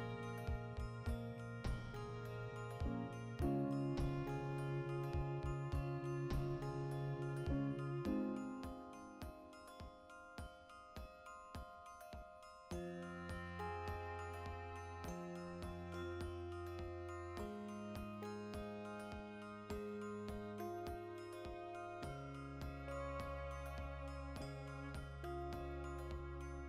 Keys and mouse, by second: 1.1 right click, 1.3 s, 1.8 Return, 2.8 click, 3.2 g, 3.9 l, 5.1 click, 5.7 z, 5.9-9.6 middle drag, 6.4 z, 6.8 Tab, 7.3 a, 9.6 right click, 10.0 Tab, 10.3 right click, 10.6 l, 11.6-15.7 drag, 14.7 \, 15.1 Tab, 15.5 KP_Decimal, 15.7-23.3 middle drag, 22.0 Tab, 23.3 shift+d, 23.9 click, 24.5 shift+right click, 24.9 \, 25.5 right click, 25.7 alt+q, 26.1-26.6 ctrl+middle drag, 26.4 r.